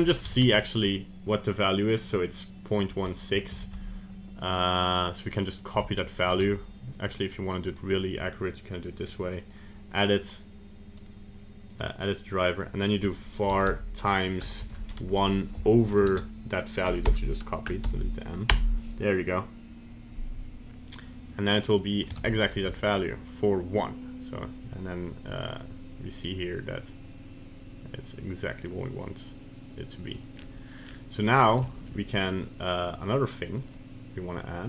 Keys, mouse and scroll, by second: 0.3 ctrl+Tab, 0.6 right click, 1.9 click, 4.9 right click, 5.8 Tab, 6.3 ctrl+Tab, 7.7 right click, 8.7 right click, 11.0 right click, 13.7 BackSpace, 21.7 right click, 22.2 ctrl+Tab, 22.4 right click, 22.7 g, 30.4-30.9 scroll down 2, 30.9-31.4 scroll up 3, 31.4 scroll down 1, 31.7 shift+middle click, 33.3 click.